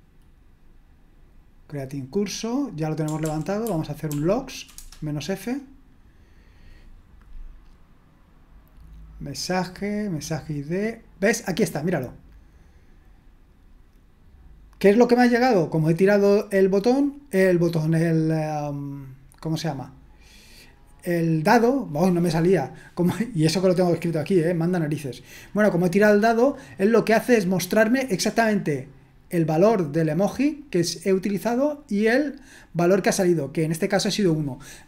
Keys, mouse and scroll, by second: 3.2 ctrl+p, 3.6 ctrl+p, 4.0 ctrl+p, 4.8 Return, 11.9-13.1 drag, 30.3 click, 31.7 click.